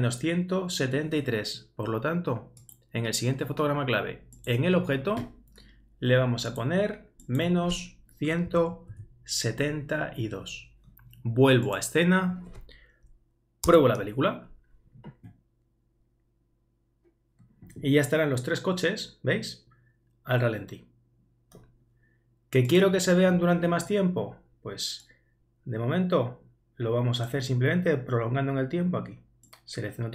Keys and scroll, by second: 8.5 shift+Right, 8.9 shift+2, 13.7 super+Return.